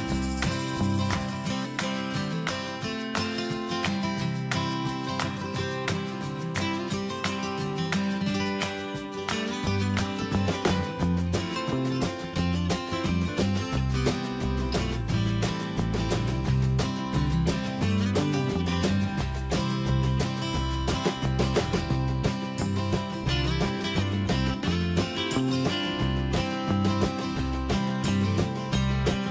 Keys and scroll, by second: 12.8 ctrl+z, 25.4 ctrl+e.